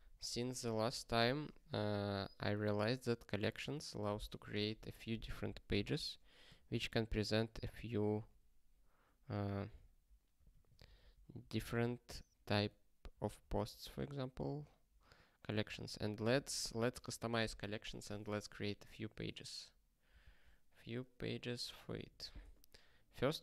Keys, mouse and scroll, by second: 5.8 #, 6.5 :, 6.9 c, 10.4-14.4 typing, 15.6 Return.